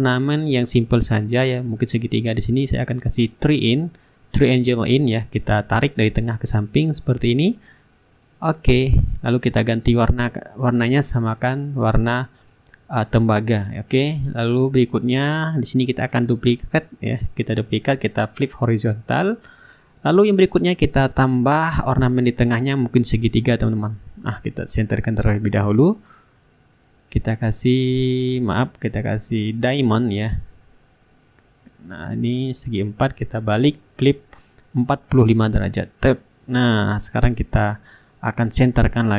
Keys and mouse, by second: 1.6 click, 5.6 click, 7.0 ctrl+click, 7.9 Return, 11.2-13.1 drag, 13.2 click, 13.9-15.0 middle drag, 15.5 ctrl+d, 20.3 click, 21.1 ctrl+g, 21.5-22.6 middle drag, 22.6 shift+click, 23.7 click, 26.7-29.6 drag, 29.8-32.1 ctrl+drag, 32.4-36.8 shift+drag, 36.9-39.1 drag.